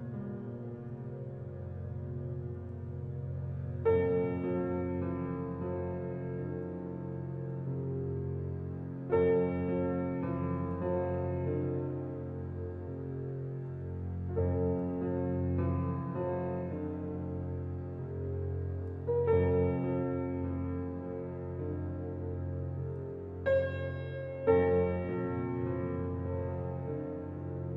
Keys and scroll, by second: 17.4 [.